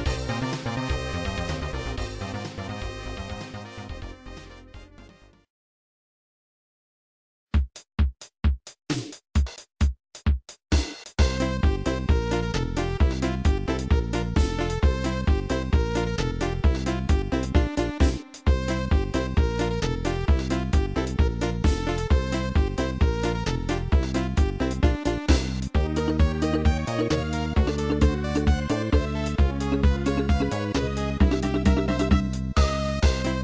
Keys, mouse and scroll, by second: 4.4 click, 6.7 click, 6.9 click, 9.0-9.3 scroll down 2, 12.5 click, 21.4 click, 23.6 ctrl+s, 23.9 click.